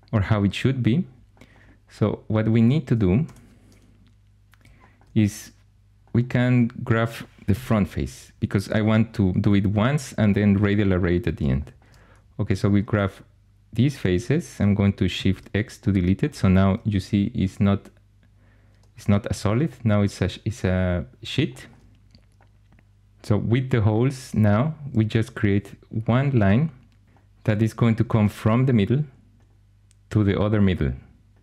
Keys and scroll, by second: 7.4 1, 15.0 shift+x, 28.0 shift+a.